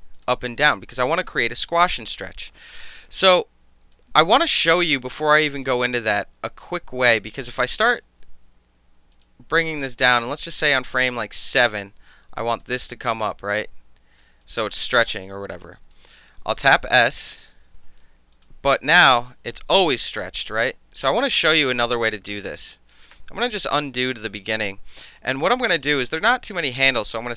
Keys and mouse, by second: 0.2 click, 0.7 alt+right drag, 1.2-1.6 alt+drag, 3.9 alt+drag, 4.2 alt+middle drag, 4.4 alt+right drag, 5.0 alt+click, 5.2 alt+middle drag, 5.4 alt+right drag, 5.7 alt+middle drag, 6.1-6.7 alt+middle drag, 6.7 alt+click, 7.3 alt+drag, 9.1 alt+click, 11.0 click, 12.5 click, 13.3-14.2 drag, 14.4 alt+click, 15.9 alt+click, 16.2 alt+click, 17.2 s, 18.3 alt+click, 19.2-21.1 drag, 21.3 ctrl+z, 21.7 ctrl+z, 22.0 ctrl+z, 22.3 ctrl+z, 23.1 ctrl+z, 25.2 alt+click, 25.5 alt+right drag, 27.3 click.